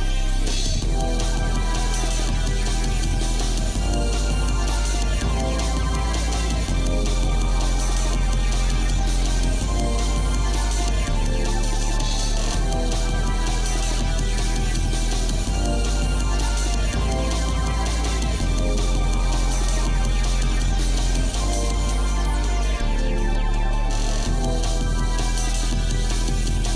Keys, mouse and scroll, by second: 2.7-8.6 drag, 10.3 g, 14.4-17.0 shift+middle drag, 17.2-17.5 scroll down 2, 17.5 scroll up 1, 17.5-18.1 scroll down 2, 18.0 scroll up 1, 18.4 middle click, 19.0 shift+middle click, 19.7-20.1 scroll up 1, 20.3 scroll up 1, 20.6-22.3 shift+middle drag, 22.9 scroll up 1, 23.5 shift+middle click, 24.7 middle click, 25.2 shift+middle click, 26.3 shift+middle click.